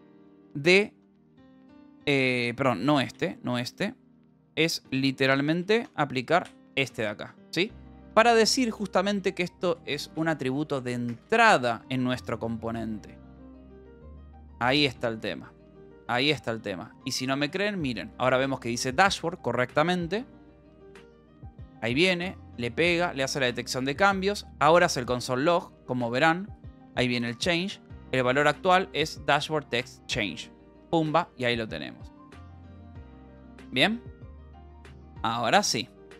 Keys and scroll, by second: 1.7-6.4 typing, 2.9 Escape, 7.4-9.9 typing, 9.7 Left, 10.1 Right, 11.0 BackSpace, 11.7 ctrl+s, 13.7 ctrl+s.